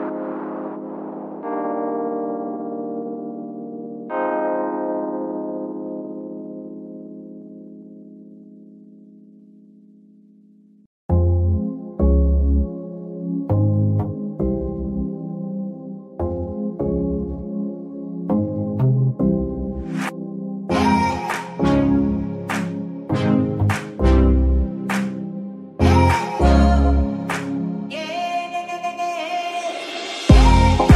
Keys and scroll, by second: 0.0 Escape, 15.5 z, 15.9 a, 16.8 g, 16.9 z, 19.8 Escape, 20.1 z, 22.4 ctrl+s, 26.7 shift+Tab, 27.3 r, 27.4 z, 28.7 Escape, 29.3 Tab.